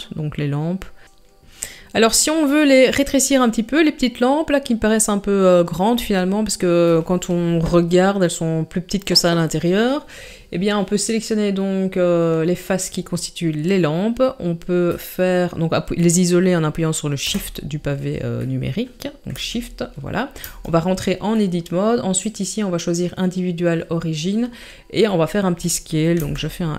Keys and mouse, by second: 18.4-18.8 middle drag, 19.3 KP_Divide, 20.4 Tab, 21.4 middle click, 22.2-24.2 drag, 25.1 middle click, 26.2 s.